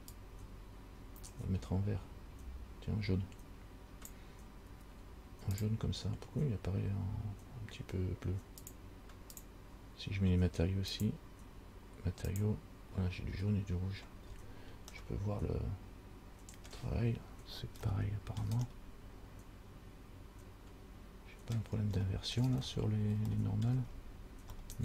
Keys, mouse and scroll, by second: 8.8 click, 9.5 click, 12.7 click, 14.5-15.1 scroll up 4, 15.2 middle click, 18.1 shift+middle click, 18.9 middle click, 22.2 shift+middle click, 22.8-23.5 scroll up 2, 23.5 scroll up 1, 23.5 shift+middle click, 24.1-24.7 scroll up 1, 24.7 scroll up 1.